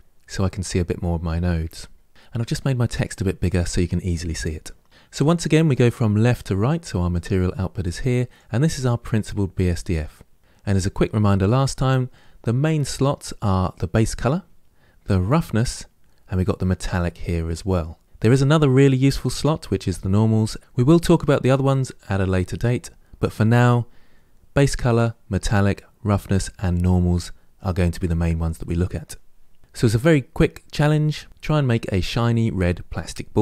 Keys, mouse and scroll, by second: 6.8 click, 8.1 click.